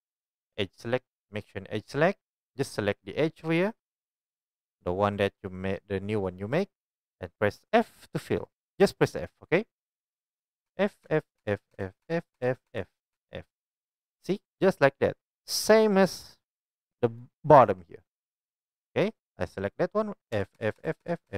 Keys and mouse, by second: 10.7-13.1 typing, 14.4 click, 19.4-21.3 middle drag, 20.3-21.3 typing.